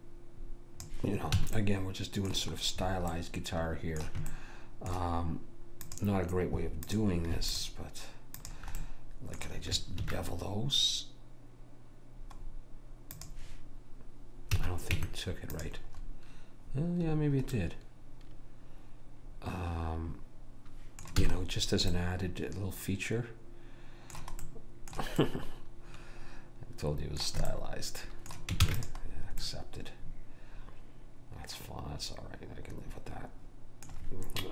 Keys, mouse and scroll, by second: 1.5 a, 1.6 middle click, 5.9-10.3 drag, 8.9-10.3 right drag, 10.2 ctrl+b, 14.6 a, 15.0 Tab, 16.7-18.6 middle drag, 21.3 a, 23.8 middle click, 24.5-26.9 middle drag, 28.7 ctrl+s.